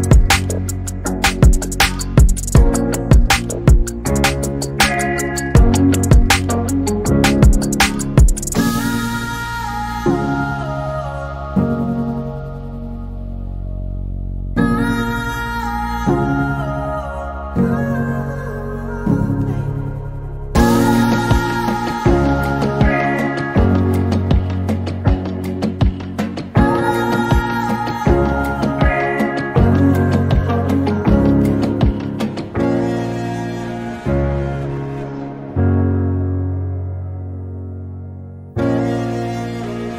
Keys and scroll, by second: 4.0 m, 8.6 |, 9.5 m, 15.1-18.7 typing, 19.7-25.0 typing, 26.2-27.9 typing, 29.1-29.5 typing, 39.2 m.